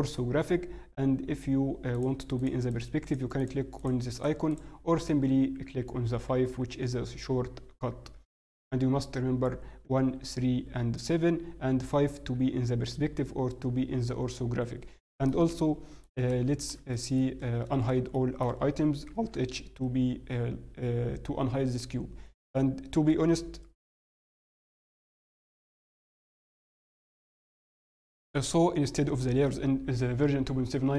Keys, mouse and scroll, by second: 1.9 click, 9.8-10.3 KP_5, 15.2 middle click, 15.2 KP_5, 16.9 shift+middle click, 17.3-17.7 scroll up 1, 17.7-18.7 scroll down 3, 18.1 shift+middle click, 19.0 alt+h, 23.7 click.